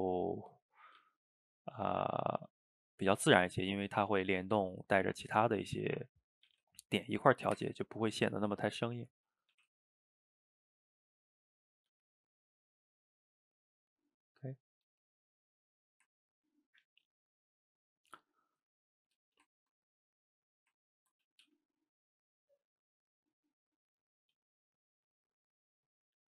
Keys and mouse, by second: 0.8 click, 1.0 g, 3.4 middle click, 4.1 click, 4.3-6.5 middle drag, 6.5 g, 7.8-8.9 middle drag, 8.9 shift+click, 9.1 middle click, 9.5 g, 11.5 middle click, 11.9 g, 12.8-14.3 middle drag, 14.3 click, 14.5 middle click, 14.9 g, 15.7-19.3 middle drag, 19.3 shift+right click, 19.5-20.2 ctrl+middle drag, 20.2 click, 20.3-21.5 middle drag, 21.5 g, 23.4-24.4 middle drag, 24.4 g, 25.4-26.4 middle drag.